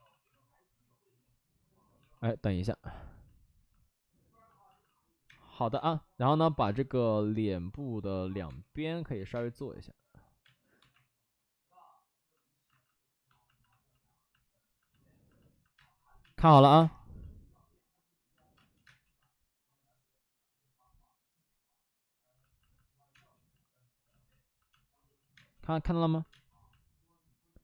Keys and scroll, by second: 0.0 ctrl+z, 1.9 f, 4.6 alt+s, 5.4 space, 5.8 space, 6.4 ctrl+z, 6.6 space, 8.4 3, 9.1 ctrl+z, 9.2 space, 10.4 space, 10.7 1, 12.6 alt+s, 15.7 space, 16.6 1, 16.7 space, 18.5 space, 23.1 space, 24.7 space, 25.1 ctrl+z, 25.3 space, 26.2 space.